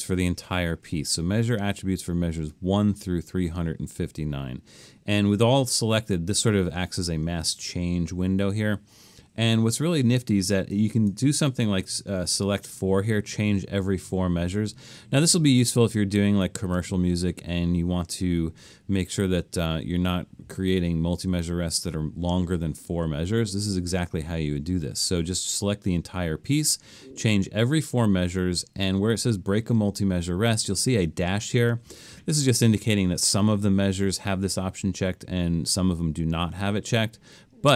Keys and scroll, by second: 11.9 4.